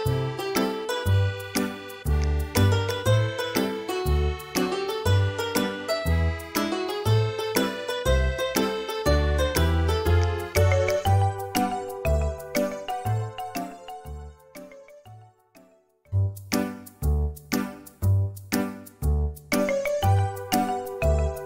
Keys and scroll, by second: 1.0 ctrl+z, 11.7 e, 17.7 shift+Escape, 20.6 space.